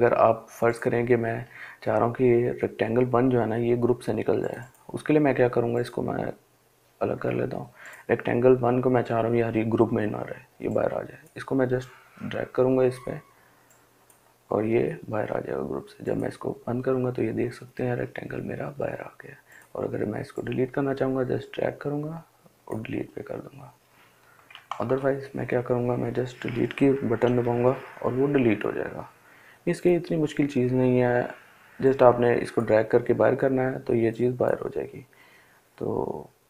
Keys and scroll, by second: 24.1 ctrl+z, 26.4 Delete.